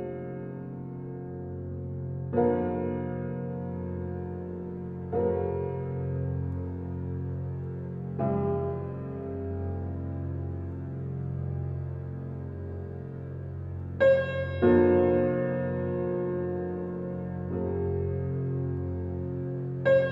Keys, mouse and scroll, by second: 0.2 click, 0.4-1.1 scroll down 1, 1.1 right click, 1.4-1.8 scroll down 1, 1.9 scroll up 1, 4.6 click, 5.1-5.5 scroll down 1, 6.2 scroll up 1, 10.2 click, 10.6 scroll down 1, 11.1 scroll up 1, 12.5-13.1 scroll down 1, 13.6-14.2 scroll up 1, 14.6 right click, 19.7-20.1 scroll down 1.